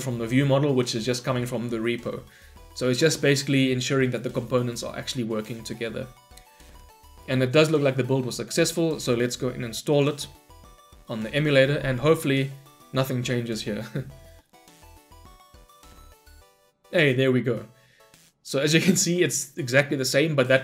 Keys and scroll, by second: 8.6 shift+F10.